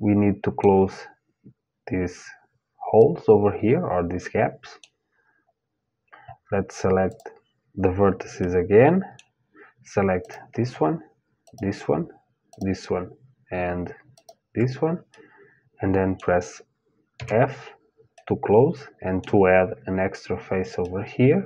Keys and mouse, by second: 2.6-6.7 middle drag, 6.7-8.7 drag, 8.7-9.8 middle drag, 9.8-15.8 drag, 15.8-16.8 middle drag, 16.8 f, 17.8-19.7 middle drag, 20.4-21.4 middle drag.